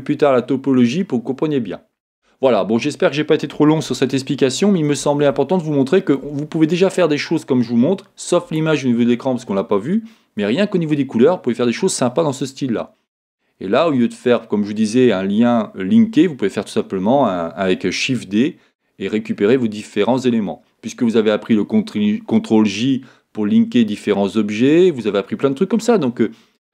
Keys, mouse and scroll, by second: 6.6 scroll up 1, 11.5 scroll down 2.